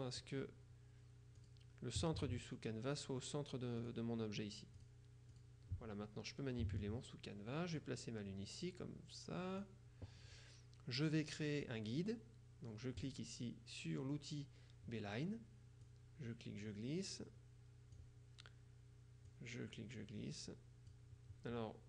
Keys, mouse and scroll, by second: 1.5 click, 3.9 click, 4.9 click, 7.9-10.2 drag, 13.1 click, 15.9-18.5 drag, 19.4-21.5 drag.